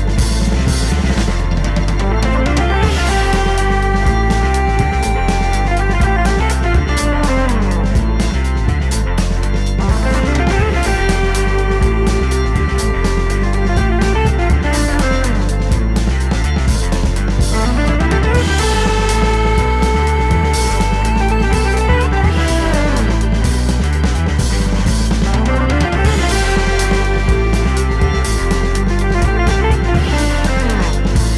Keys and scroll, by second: 4.0 Up, 9.1-9.6 scroll up 1.